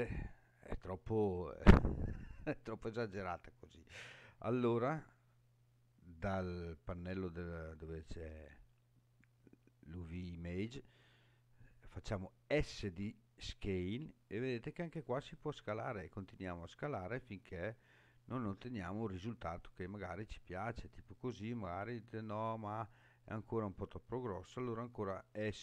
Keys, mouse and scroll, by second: 1.1-1.7 scroll down 3, 2.5 scroll down 1, 12.8 s, 18.6 click, 19.5 scroll up 2, 20.2-21.2 scroll up 5, 21.7-23.6 scroll down 3, 24.9 s.